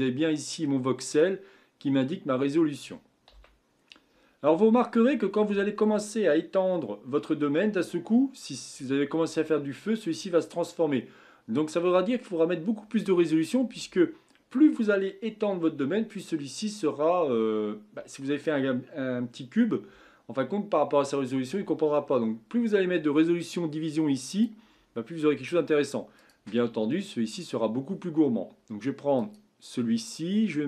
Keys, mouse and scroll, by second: 0.6-3.3 middle drag, 3.3 KP_1, 24.3-26.3 drag, 29.2 click.